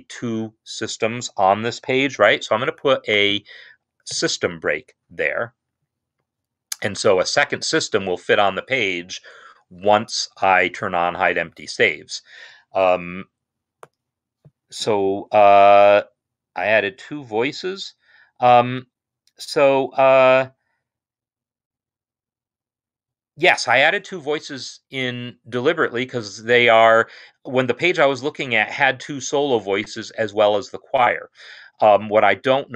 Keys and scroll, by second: 4.2 Return.